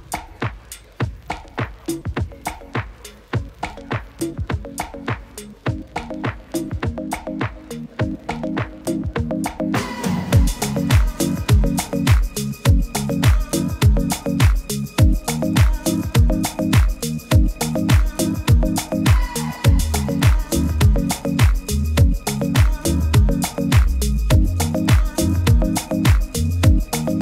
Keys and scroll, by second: 14.9 super+s, 20.0 super++, 20.1 super++, 21.4 super++, 21.5 super++, 22.7 super++, 22.8 super++, 23.3 super+-, 23.5 super+-, 23.6 super+-.